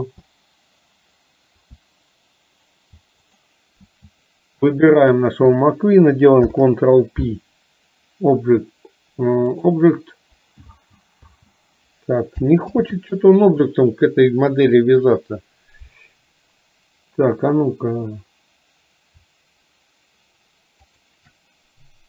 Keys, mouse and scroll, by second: 20.9 shift+click.